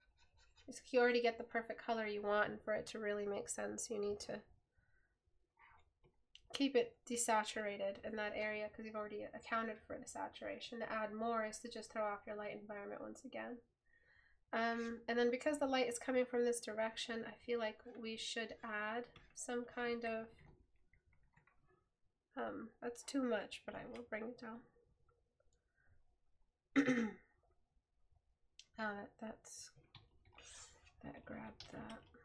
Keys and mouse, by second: 24.2 right click.